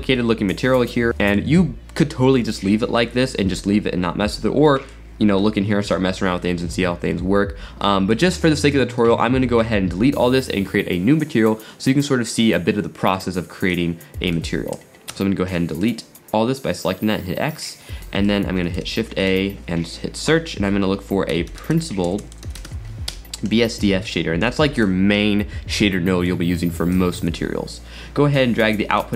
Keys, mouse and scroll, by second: 0.8 scroll down 3, 1.1-3.2 middle drag, 3.2-4.6 scroll down 6, 4.7 middle click, 5.1-5.7 scroll up 9, 6.4-8.2 middle drag, 6.9-7.9 scroll down 8, 8.8-9.4 scroll down 4, 13.8 click, 15.2 x, 15.8-17.2 middle drag, 17.2-18.0 scroll up 9, 18.1 middle click, 18.8 shift+a, 22.3 BackSpace, 27.0 drag.